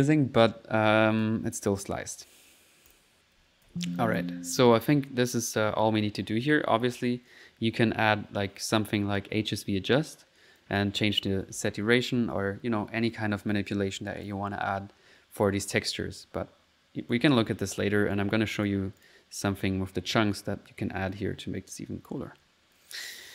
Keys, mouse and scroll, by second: 0.5 middle click, 0.9 click, 1.5 click, 1.5 typing, 2.9 click, 3.7 alt+z, 4.0 alt+click, 4.6 alt+middle click, 10.6 click, 14.1 click, 16.2-17.3 right drag, 18.1 click, 19.0 click, 22.2 middle click.